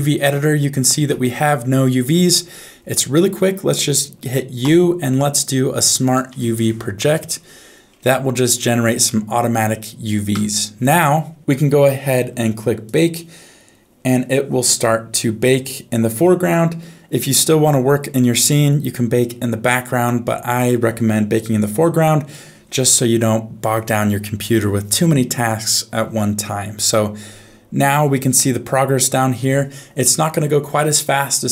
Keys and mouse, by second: 1.0 a, 4.6 u, 9.1 middle click, 10.3 Tab, 12.8-21.8 drag.